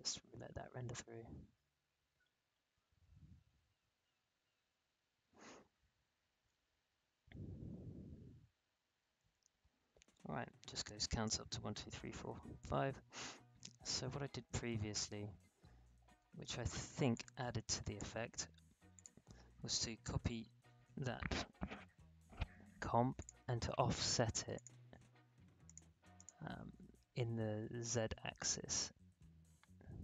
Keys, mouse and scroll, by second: 13.1 space, 14.4 scroll down 1, 15.8 space, 17.1-18.9 drag, 20.0 ctrl+c, 20.2 ctrl+v, 23.1 click, 28.4-30.0 drag.